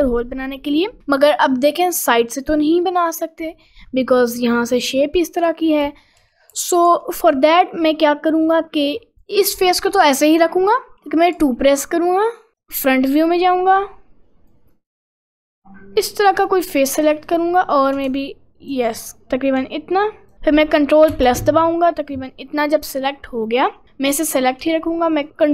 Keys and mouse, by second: 0.9 middle click, 1.3 middle click, 3.9 middle click, 4.9 middle click, 5.5 ctrl+z, 5.9 ctrl+z, 6.3 ctrl+z, 6.5 ctrl+z, 6.9 ctrl+z, 7.4 ctrl+z, 8.5 click, 9.2 click, 10.6 middle click, 11.4 2, 12.5 click, 14.7-16.1 drag, 18.2 ctrl+click, 19.9 ctrl+click, 25.4-25.5 ctrl+drag.